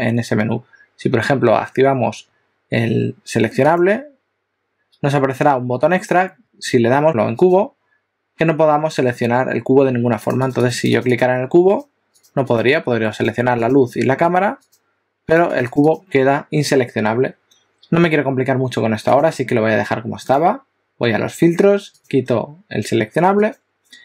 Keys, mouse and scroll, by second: 7.5 click, 10.2-11.3 click, 11.7 click, 13.2 click, 13.6 click, 14.8 click, 15.4 click, 15.8 click, 16.0 click, 19.3 click, 20.3 click, 23.5 click.